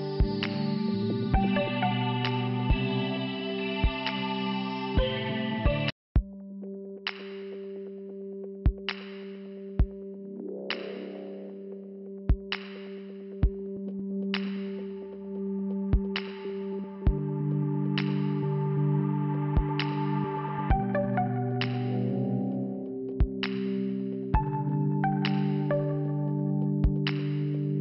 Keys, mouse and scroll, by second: 0.2 click, 0.4 click, 2.4 scroll up 2, 3.3 click, 5.5 click, 5.8 click, 6.9-7.4 scroll up 2, 10.1 click, 10.2 click, 10.2 click, 10.3 click, 11.6 click, 13.9 click, 14.7 click, 14.7 click, 15.5 click, 15.7 click, 16.7 click, 16.9 click, 17.7 click, 17.8 click, 18.7 click, 24.4 click, 24.5 click, 26.7 click, 27.0 click, 27.1 click, 27.3 click, 27.4 click, 27.6 click, 27.7 click.